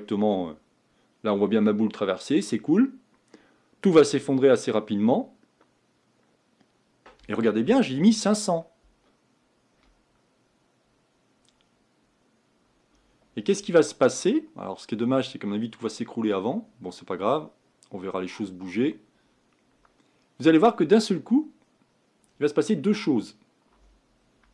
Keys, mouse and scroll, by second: 9.7-12.8 scroll down 2, 20.9-21.5 scroll down 2, 21.5-23.1 scroll down 1, 23.1-23.5 scroll up 2, 23.6-24.5 scroll up 1.